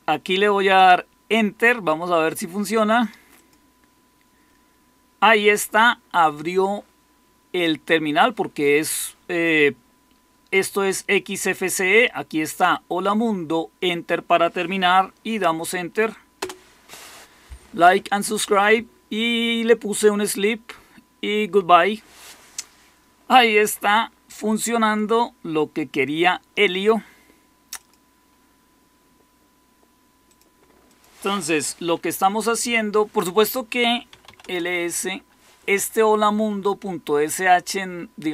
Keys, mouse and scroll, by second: 3.8 click, 16.3 Return, 32.5 typing, 33.8-34.6 typing.